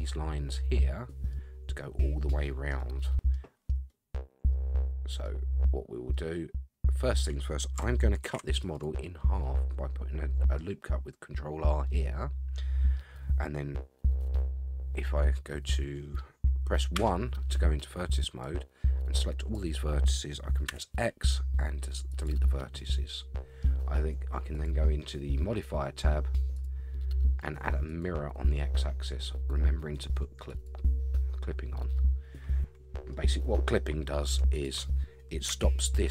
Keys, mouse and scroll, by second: 1.1 middle click, 2.8 middle click, 3.8 scroll down 1, 3.9 middle click, 4.9 middle click, 5.7-6.0 scroll up 2, 6.1-7.1 middle drag, 8.2 ctrl+r, 9.4-10.6 middle drag, 11.8-12.9 middle drag, 16.9 1, 18.4-19.5 drag, 20.7 x, 23.0 scroll down 1, 23.1 middle click, 24.5-25.7 drag, 26.5-28.0 drag, 30.5 click, 31.9-33.1 middle drag, 34.5 click, 35.5 g.